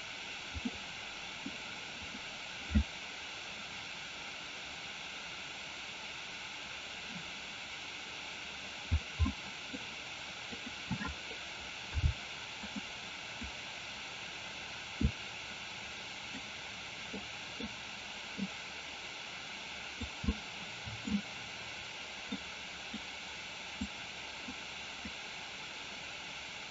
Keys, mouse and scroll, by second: 0.8 middle click, 9.4-9.8 middle drag, 12.0 g, 13.7-16.3 drag, 17.2 middle click, 18.4-20.1 drag, 20.4 middle click, 22.4 click, 23.9 click, 25.0-26.7 drag.